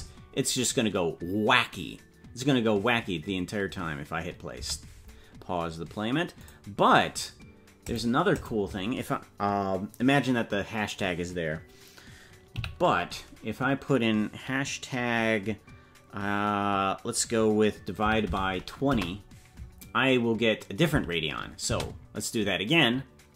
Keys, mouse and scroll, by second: 6.3 space.